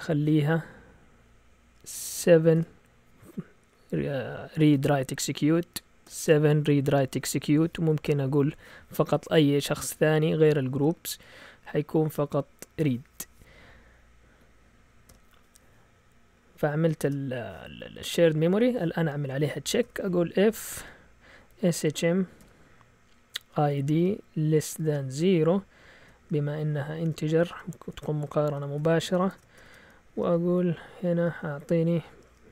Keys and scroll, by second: 2.6 7, 6.1 7, 7.8-8.6 typing, 14.3 Right, 15.1 ;, 17.1 Return, 19.8-22.4 typing, 23.7-25.1 typing, 27.1 Delete, 27.9 shift+Tab, 28.8-31.8 typing.